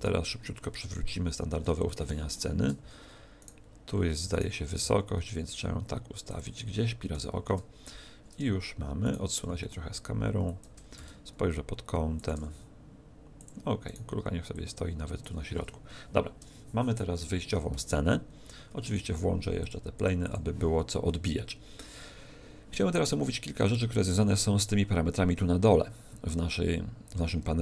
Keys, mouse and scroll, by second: 1.0 KP_5, 1.8 shift+middle click, 2.2 shift+middle click, 2.8 z, 3.4 right click, 4.3 right click, 4.8 g, 6.3 click, 7.4 KP_0, 9.0 right click, 9.4 g, 10.6 click, 10.9 shift+f, 12.2 click, 12.8 g, 13.4 click, 13.8 right click, 14.5 click, 19.6 click.